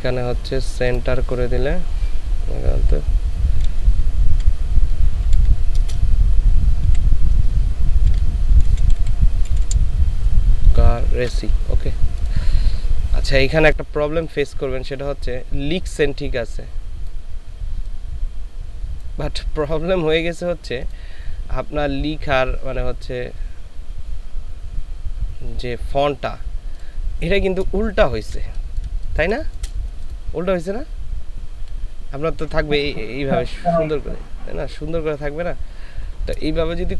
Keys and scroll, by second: 3.7 shift+c, 4.3 shift+a, 5.2 shift+r, 5.8 shift+space, 8.1-9.7 typing, 27.9 ctrl+space, 28.6 ctrl+space, 36.8 ctrl+space.